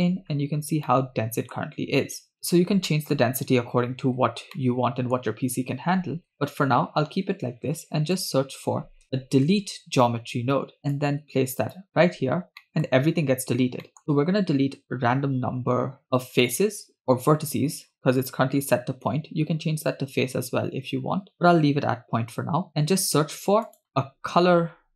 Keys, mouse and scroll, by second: 0.3-0.9 scroll up 3, 1.0-1.6 middle drag, 2.5 scroll down 3, 2.9 middle click, 4.2 scroll up 2, 4.5-5.1 middle drag, 7.5 shift+a, 12.6 middle click, 13.5-13.8 scroll down 2, 13.8 middle click, 17.0 middle click, 18.2-22.6 drag, 22.7 shift+a.